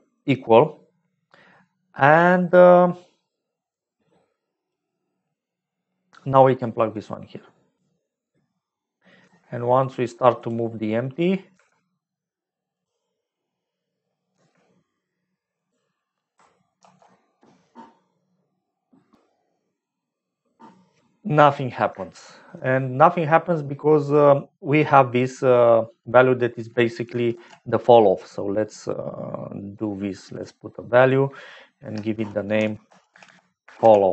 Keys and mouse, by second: 3.6-4.8 drag, 6.9-9.3 drag, 9.3 g, 10.7 click, 11.5 g, 13.1 click, 14.7 g, 16.7 ctrl+s, 22.1 shift+middle click, 24.7 click, 26.8 click, 27.3 shift+a, 33.2 F2, 33.2 l.